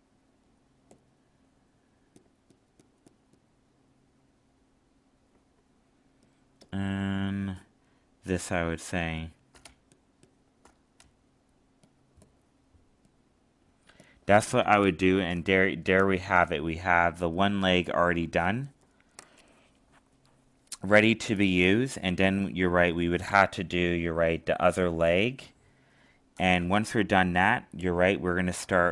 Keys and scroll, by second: 27.8 alt+space.